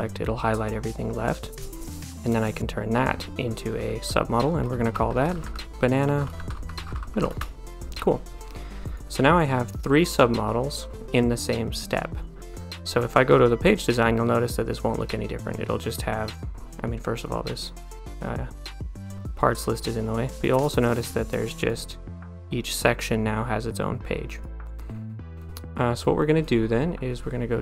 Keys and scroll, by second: 4.7-7.6 typing.